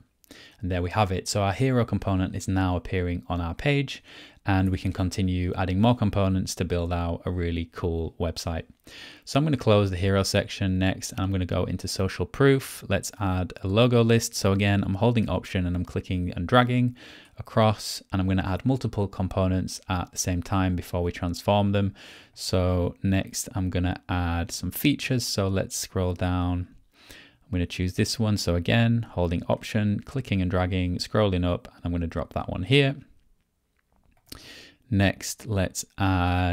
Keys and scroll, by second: 4.6 Return, 5.8 Return.